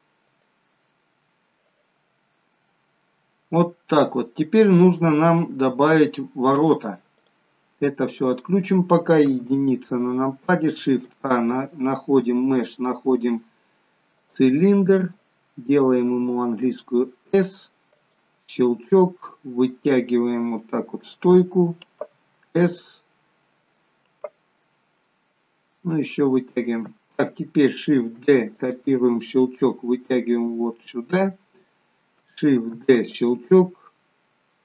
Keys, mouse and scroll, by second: 2.6-3.1 scroll up 2, 3.0 middle click, 6.6 click, 7.6 click, 7.8 middle click, 9.2 KP_1, 10.8 shift+a, 16.2 s, 19.0 click, 23.6 s, 25.3 click, 28.1 shift+d, 29.4 click, 32.6 shift+d, 34.1-34.6 scroll down 2.